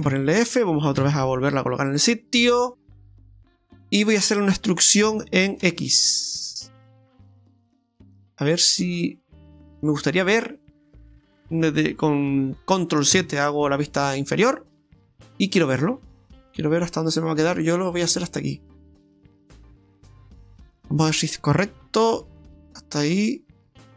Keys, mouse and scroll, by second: 0.1 f, 2.0 scroll up 1, 2.3 middle click, 3.3-4.0 scroll down 4, 5.1 e, 13.1 ctrl+KP_7, 15.6 click, 16.8 click, 20.0-20.6 scroll down 4, 20.6 scroll up 1, 20.8 middle click.